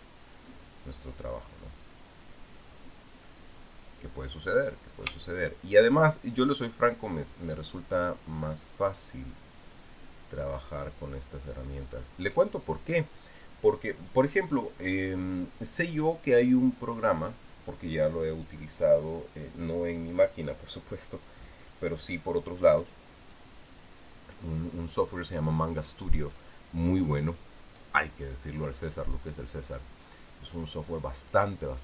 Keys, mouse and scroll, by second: 5.7 shift+click, 12.7 shift+click.